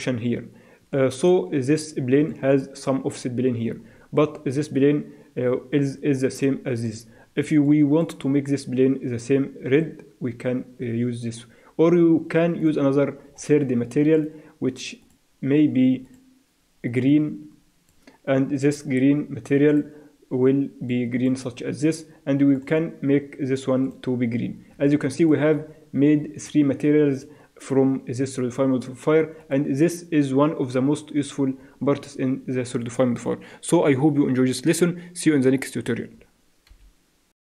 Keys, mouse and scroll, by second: 0.0-1.9 drag, 0.9-8.1 middle drag, 9.7-11.6 drag, 12.6-17.8 drag, 19.7-21.5 drag, 22.5-25.7 drag, 25.7 middle click, 26.7-28.3 middle drag, 29.4-31.2 drag, 36.7 F10.